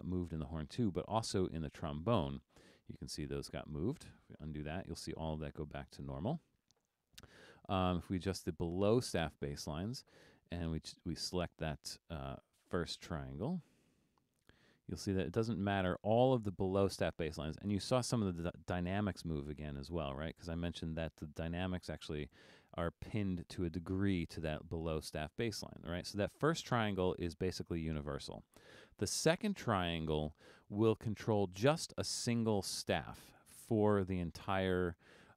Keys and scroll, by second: 5.5 super+z, 25.4 super+z.